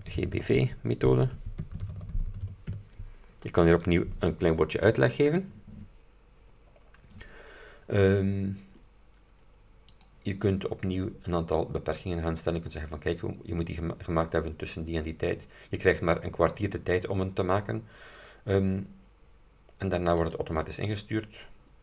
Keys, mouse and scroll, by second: 0.0-3.0 typing, 4.0 click, 4.9-5.3 scroll down 2, 10.0 click, 10.7-11.7 scroll down 4, 20.3 click.